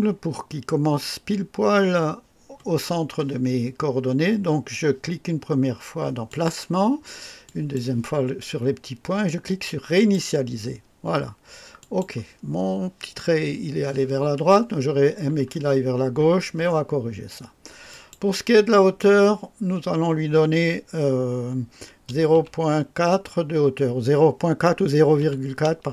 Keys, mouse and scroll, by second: 0.2 scroll up 1, 2.9 scroll down 1, 6.3 click, 7.4 click, 9.9 click, 11.8 click, 17.9 click, 22.0 KP_0, 22.1 KP_0, 22.3 KP_Decimal, 25.2 KP_4, 25.2 KP_4.